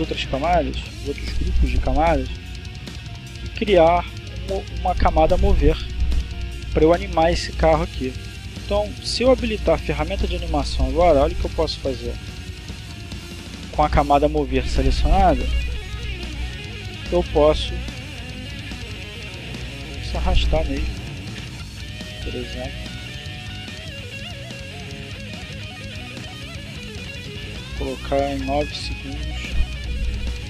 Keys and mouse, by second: 0.2 right click, 5.2 click, 8.5 click, 10.4-11.4 drag, 14.2 click, 15.5 click, 16.7 Left, 19.5-20.5 drag, 20.7-21.8 drag, 22.7 click, 23.7 click, 24.7 click, 28.0 click, 30.0 click.